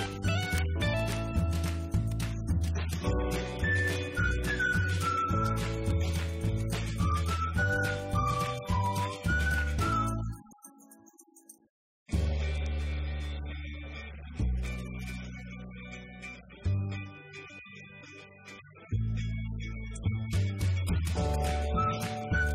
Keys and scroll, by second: 4.4 Escape.